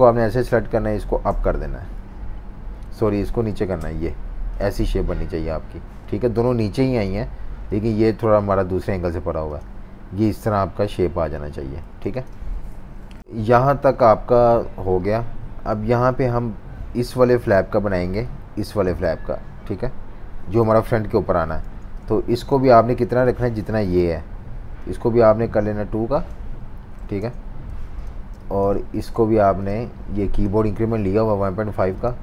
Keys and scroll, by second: 1.3 Page_Up, 3.0 super+z, 3.7 Down, 6.2 typing, 11.9 typing, 12.8 super+-, 14.0 F19, 21.6-23.1 typing, 27.0 2, 27.2 Return, 28.1 typing.